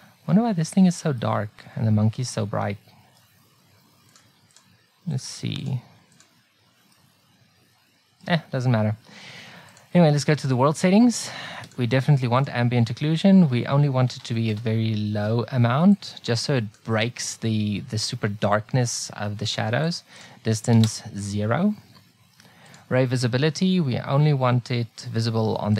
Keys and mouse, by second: 1.2 middle click, 4.2 click, 5.4 click, 7.0 click, 7.6-8.8 middle drag, 9.7-11.3 middle drag, 11.3 click, 11.5-13.9 middle drag, 14.2-16.0 middle drag, 17.8-19.9 middle drag, 22.0 middle click.